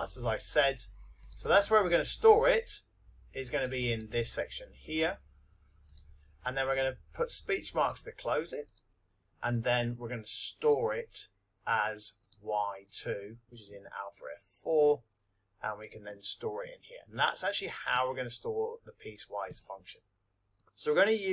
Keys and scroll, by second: 1.2 Right, 2.5 Right, 3.5 Down, 4.9 Down, 5.8 Right, 15.9 2.